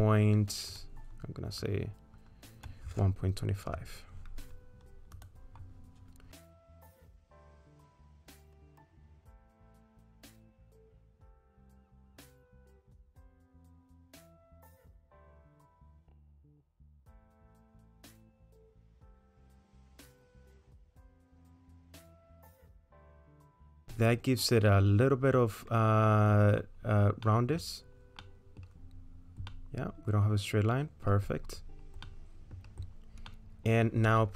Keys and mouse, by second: 0.7-5.3 drag, 6.4 middle click, 7.4 middle click, 9.0 shift+click, 9.6 s, 10.6-14.7 drag, 15.0 click, 16.4-21.8 drag, 22.3 middle click, 23.8-26.4 middle drag, 27.3 middle click, 28.2 middle click, 29.5-31.1 middle drag, 32.1 middle click, 33.4 middle click.